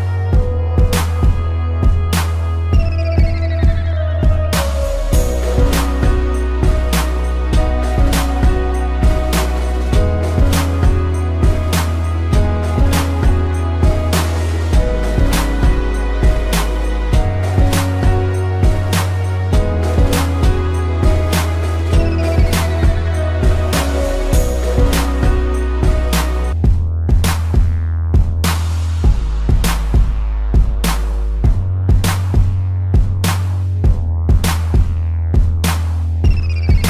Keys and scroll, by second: 1.6 space, 4.6 ctrl+z, 5.8 space, 10.2 space, 13.5 space, 18.3 space, 22.0 ctrl+-, 22.7 space, 26.0 ctrl+z, 33.3 space, 34.2 space.